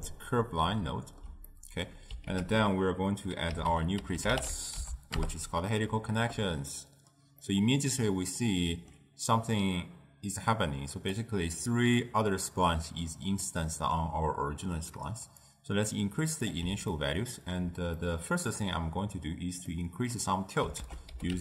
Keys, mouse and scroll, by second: 5.3 ctrl+a, 7.5-15.7 middle drag, 15.7-17.0 drag, 17.0-21.4 ctrl+middle drag.